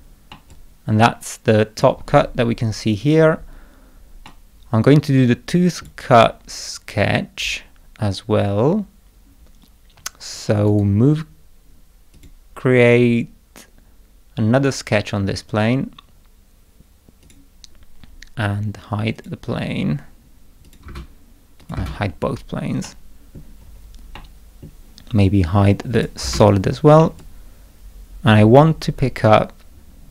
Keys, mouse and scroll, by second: 0.3-1.7 middle drag, 0.5-1.8 drag, 4.2-5.8 drag, 4.2-5.8 middle drag, 10.6 right click, 12.1 click, 14.5 click, 17.2 click, 19.1 click, 20.6 click, 20.8 space, 21.6 click, 21.7 space, 22.8 middle click, 23.6-23.9 scroll up 2, 24.1 middle click, 25.9 click, 27.0-28.5 middle drag, 27.2-28.5 drag.